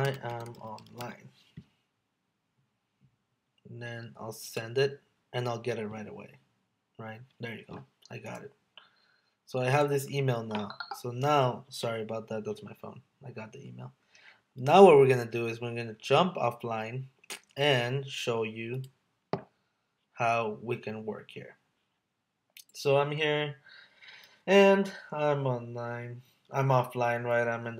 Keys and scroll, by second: 0.3 space.